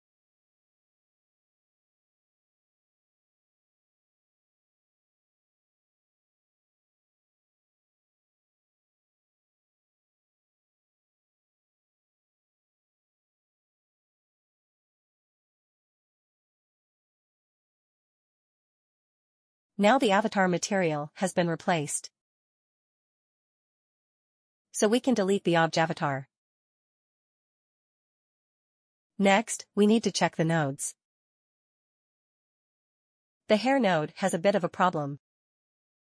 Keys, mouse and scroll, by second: 2.2 click, 3.3 double click, 3.4 click, 4.2 click, 4.7 click, 6.0 scroll down 1, 6.2 click, 7.0 scroll down 1, 7.1 click, 7.9 scroll down 1, 8.1 click, 8.5 scroll down 1, 9.7 click, 9.9 click, 10.0 scroll down 1, 10.4 click, 11.0 scroll down 1, 11.2 click, 12.2 click, 13.7 click, 14.0-14.3 scroll down 1, 14.3 click, 15.6 click, 15.8 double click, 16.3 click, 16.9 click, 17.7 click, 18.1 click, 18.4 double click, 18.7 click, 20.9 middle click, 22.5 middle click, 23.2 click, 24.5 right click, 25.3 click, 26.1 Delete, 26.9 scroll up 1, 27.5 click, 29.9 shift+middle click, 30.5 shift+middle click, 31.4 click, 32.2 scroll down 1, 32.9 middle click, 32.9 middle click, 33.5 click, 34.1 click, 34.5 click, 35.5 scroll down 1.